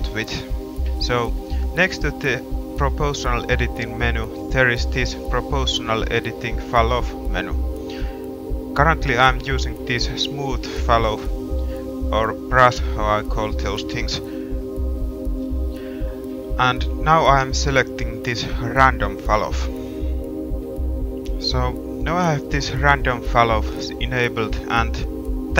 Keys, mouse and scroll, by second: 21.7-23.7 middle drag, 23.7 g.